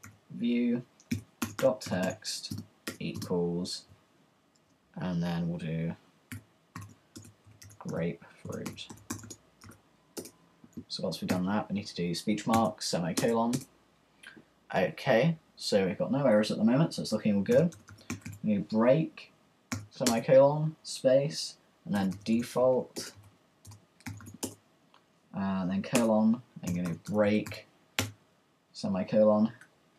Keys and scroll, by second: 0.0-2.8 typing, 4.1 shift+=, 4.6 shift+2, 5.9-10.1 typing, 11.3-13.6 typing, 17.3-20.6 typing, 21.7-25.1 typing, 26.4-28.1 typing.